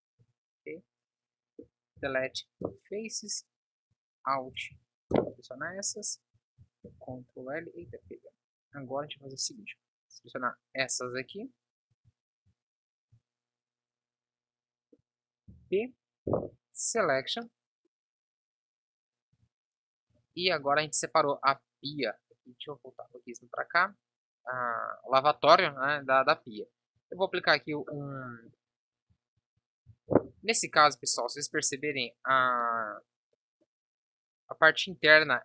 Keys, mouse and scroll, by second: 0.2 b, 1.9 Delete, 6.7 ctrl+l, 8.7 b, 13.1 b, 15.4 p, 16.9 z, 20.7 Tab, 25.4 Tab, 29.4 a, 30.1 ctrl+n, 30.5 Tab.